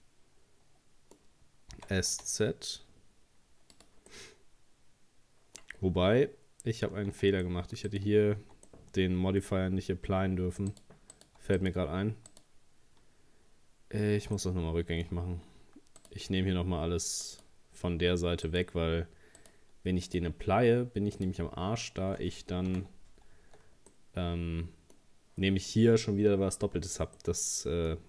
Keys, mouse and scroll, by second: 1.7 s, 4.1-5.8 middle drag, 5.8 scroll down 2, 7.1 Tab, 7.4 middle click, 7.9 right click, 8.4 Tab, 8.7 middle click, 9.5-10.3 scroll up 4, 10.7 right click, 11.1 right click, 11.6 alt+shift+right click, 12.3 alt+shift+right click, 14.4-16.0 middle drag, 16.0 alt+shift+right click, 17.2 alt+shift+right click, 18.5 alt+shift+right click, 19.4 alt+shift+right click, 20.1 alt+shift+right click, 21.2 alt+shift+right click, 22.7 ctrl+z, 23.9-26.7 middle drag, 26.7-27.2 scroll down 3, 27.2-28.0 middle drag.